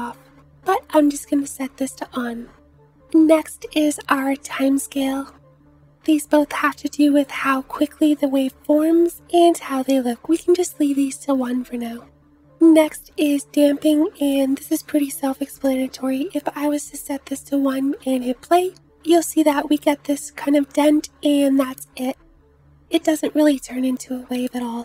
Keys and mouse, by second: 16.3 space, 17.6 space, 20.6 space, 22.0 space, 22.3 space, 23.1 space.